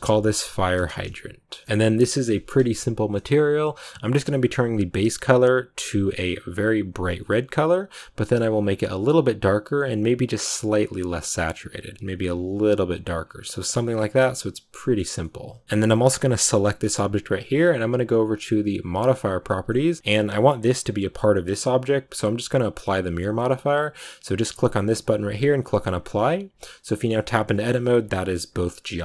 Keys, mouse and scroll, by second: 1.6-5.8 shift+middle drag, 5.8 click, 13.4 middle click, 13.7 scroll down 2, 13.8-15.0 middle drag, 15.0 scroll up 1, 15.1-16.3 middle drag, 16.3-19.4 right drag, 19.4 scroll down 1, 19.6 middle click, 20.0-23.0 scroll up 1, 23.0-26.6 drag, 26.6 middle click, 27.0 Tab, 27.4 scroll up 1, 27.6 a, 27.8 a.